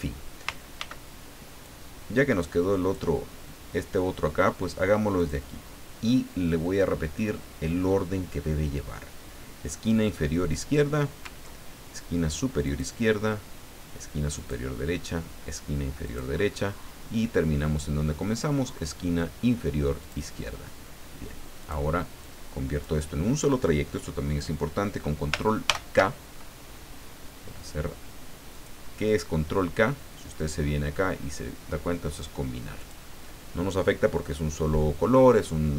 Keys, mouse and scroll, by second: 0.8 ctrl+d, 1.6-3.1 ctrl+drag, 5.1 click, 10.5 click, 12.7 click, 14.4 click, 16.1 click, 20.0 click, 21.6 click, 22.2 click, 25.7 ctrl+k, 28.5 click, 32.8 click.